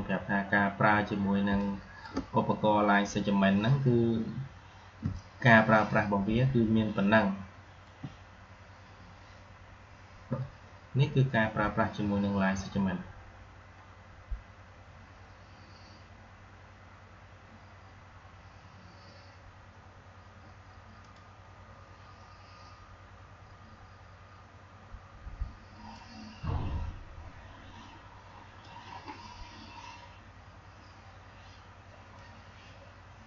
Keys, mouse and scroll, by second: 0.6 alt+scroll down 1, 1.3 space, 1.4-2.0 click, 1.8 space, 3.8 alt+scroll up 1, 5.0 click, 5.3-7.8 space, 7.8 space, 20.9 click, 25.8-28.6 drag, 32.0-33.2 drag.